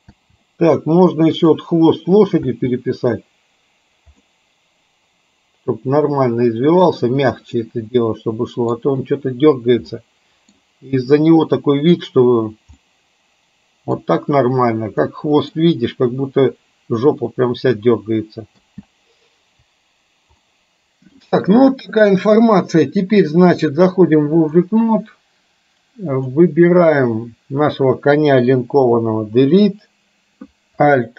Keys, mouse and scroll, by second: 0.1 space, 1.5 click, 2.5 space, 4.2-7.0 middle drag, 7.6-8.8 middle drag, 10.1-10.6 middle drag, 13.0-14.0 middle drag, 15.1-15.6 middle drag, 18.6 space, 20.5-21.2 middle drag, 23.2-24.6 drag, 29.2 Delete.